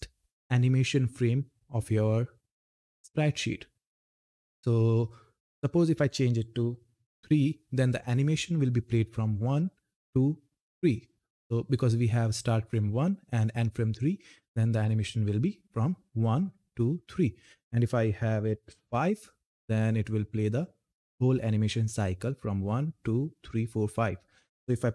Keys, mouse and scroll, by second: 20.0 click.